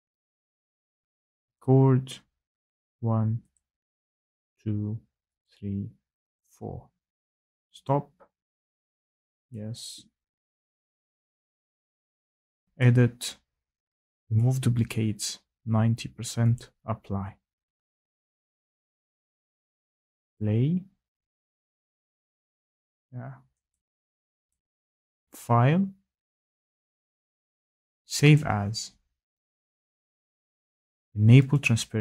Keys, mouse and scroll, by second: 0.1 click, 1.5 click, 2.7 click, 3.5 click, 4.5 click, 5.4 click, 6.3 click, 7.8 click, 9.5 click, 12.8 right click, 14.3 right click, 16.5 right click, 19.8 click, 20.3 click, 23.7 click, 23.8 click, 24.0 click, 28.3 click.